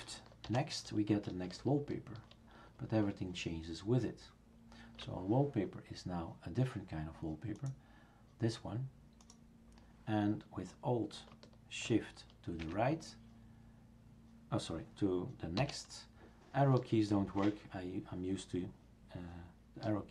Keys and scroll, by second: 0.4 alt+shift+n, 12.6 alt+shift+Right, 15.6 alt+shift+n.